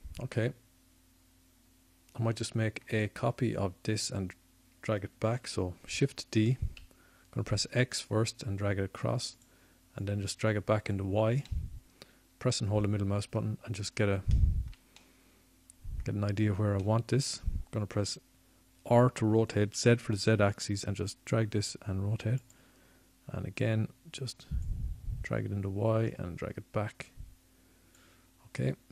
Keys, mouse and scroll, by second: 2.6-4.7 middle drag, 5.0 middle click, 7.4 middle click, 11.2 shift+d, 15.2 click, 20.8-23.8 drag, 23.8 r.